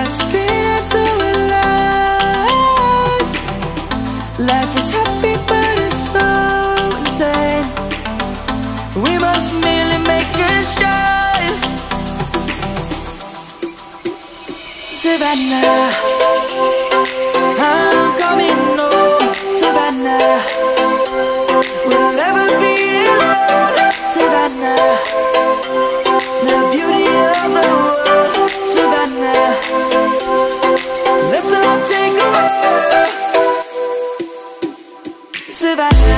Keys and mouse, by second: 2.7 middle click, 4.3 click, 4.4 middle click, 4.8 click, 8.7 middle click, 9.5 1, 11.6 middle click, 12.5 click, 15.5 click, 17.0 shift+click, 17.4 middle click, 19.0 shift+click, 19.9 shift+click, 21.6 ctrl+b, 25.6 1, 27.7 ctrl+b, 32.1 right click, 33.9 Tab, 34.5 click.